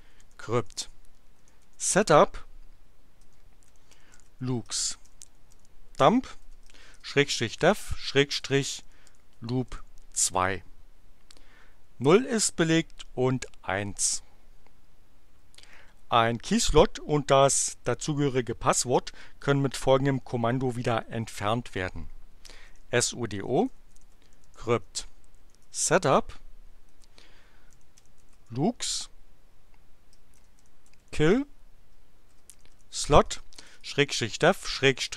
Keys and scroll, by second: 0.0-9.8 typing, 22.2-28.7 typing, 30.0-35.1 typing.